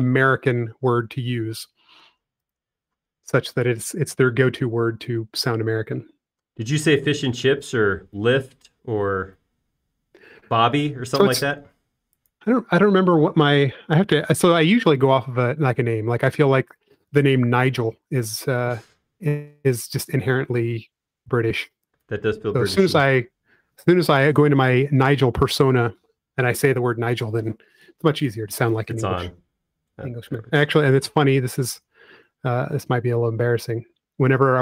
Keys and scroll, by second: 2.7 space, 4.0 shift+m, 13.9 space, 19.5 m, 33.2 Return.